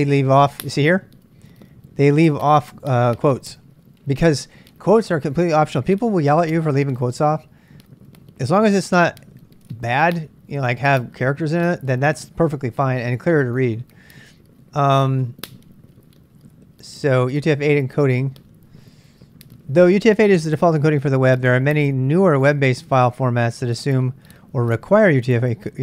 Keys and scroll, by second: 15.2 k.